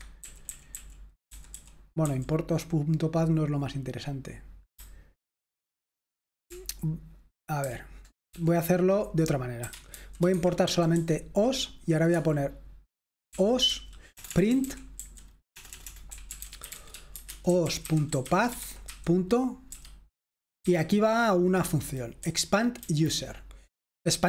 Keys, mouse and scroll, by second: 0.0-2.1 typing, 4.8-8.3 typing, 9.5-12.6 typing, 14.3-20.6 typing, 22.3 Down, 22.8 Down.